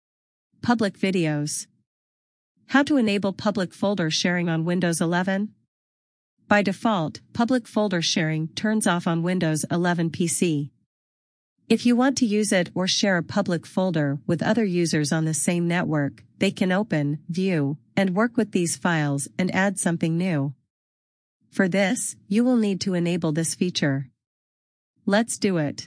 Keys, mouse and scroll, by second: 3.0 click, 4.2 scroll down 1, 7.3 scroll up 1, 15.6 click, 18.3 click, 24.7 click.